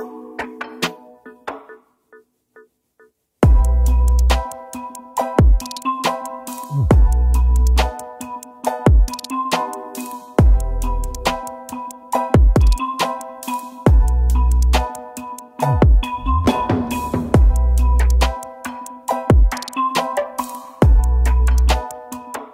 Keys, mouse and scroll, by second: 3.6 alt+Tab, 5.5 Down, 7.1 right click, 8.1 typing, 9.1 double click, 14.2 ctrl+z, 14.5 scroll up 1, 18.9 double click, 20.6 right click.